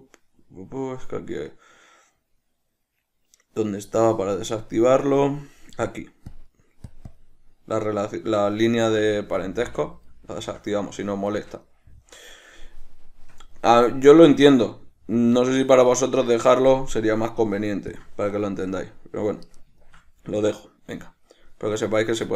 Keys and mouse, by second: 4.7-10.6 drag, 10.6-17.3 shift+middle drag, 17.3-18.9 drag, 18.9-22.3 middle drag.